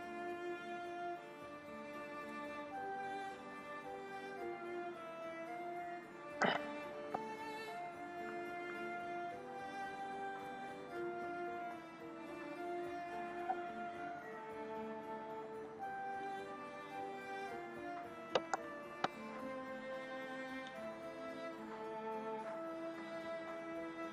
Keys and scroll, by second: 6.4 space, 17.0 ], 18.5 space, 19.4 ], 23.8 ].